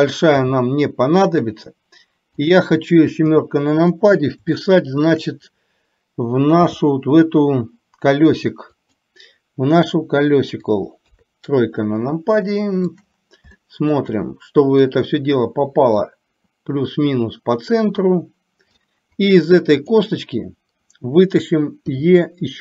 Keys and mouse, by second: 0.4 g, 3.4 KP_7, 4.6 shift+middle click, 6.8 g, 11.1 KP_3, 12.5 shift+middle click, 13.8 shift+middle click, 16.1-19.0 drag, 20.0 click, 22.0 e.